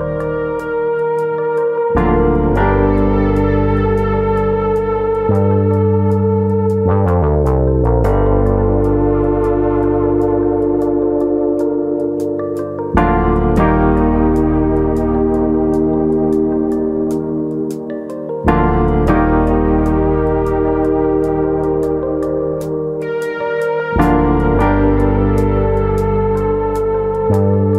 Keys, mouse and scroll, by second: 1.0 KP_1, 3.7 Tab, 4.4 click, 4.9 click, 9.0 click, 9.5 click, 14.0 Tab, 14.5 shift+middle click, 14.5 click, 14.7 middle click, 15.0-15.8 scroll up 4, 15.2 shift+middle click, 16.1 click, 16.5 middle click, 16.8 shift+middle click, 17.1 middle click, 17.7 shift+middle click, 18.6 ctrl+KP_Add, 19.8 shift+middle click, 20.1 middle click, 20.6 shift+middle click, 20.9 scroll up 2, 21.3 shift+middle click, 22.0 middle click, 23.3 e, 24.1 click, 24.4 middle click, 25.8 s.